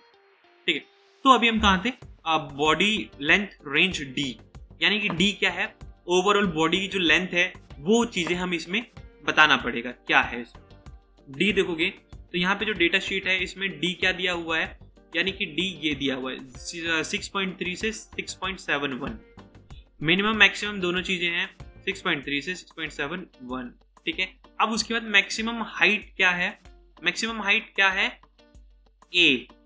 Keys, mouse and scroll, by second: 23.9 typing.